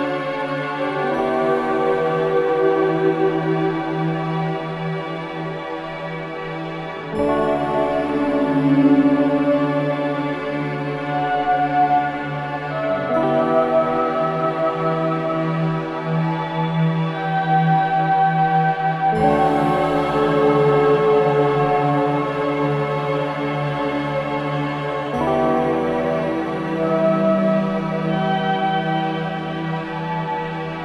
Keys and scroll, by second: 15.2 BackSpace, 22.1 ctrl+shift+KP_0, 28.8 ctrl+shift+z.